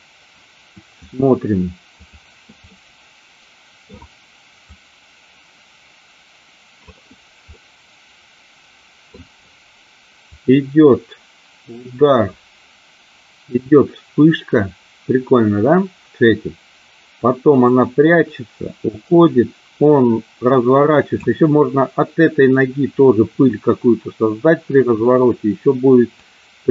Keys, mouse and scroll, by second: 2.1 click, 2.8-4.1 middle drag, 4.8 click, 7.7-9.2 middle drag, 10.3 click, 26.3 click.